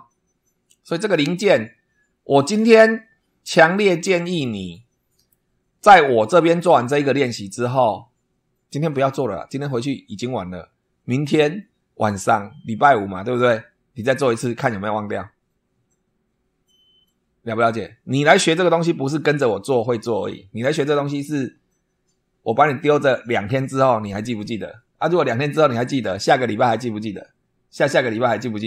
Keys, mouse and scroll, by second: 3.3 shift+click, 4.3-5.4 shift+drag.